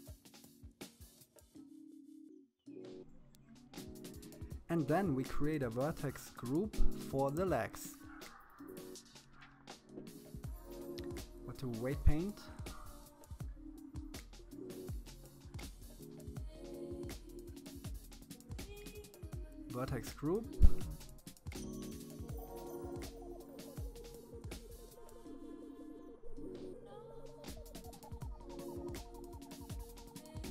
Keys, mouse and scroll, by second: 0.5 click, 1.6 click, 6.1-7.3 middle drag, 7.5-9.1 drag, 17.5 click, 18.7-19.6 scroll up 7, 20.1-23.5 drag.